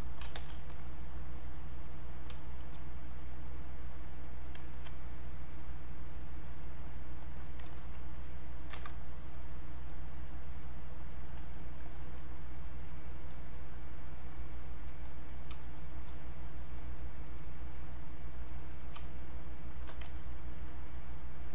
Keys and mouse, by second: 0.0-0.8 typing, 1.0 click, 2.3 space, 2.9 click, 4.7 alt+click, 5.2 click, 7.7 alt+click, 8.8 ctrl+z, 9.3 click, 15.5 space, 15.9 click, 19.0 space, 20.2 alt+click, 20.7 click.